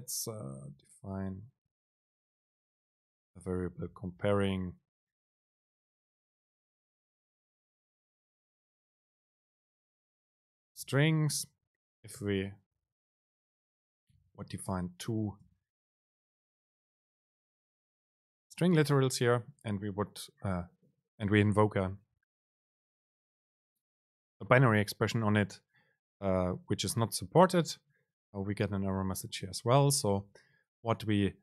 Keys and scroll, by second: 1.4 Return, 6.7 BackSpace, 11.0 Right, 12.9 BackSpace, 14.6 Right, 17.2 Right, 17.3 Up.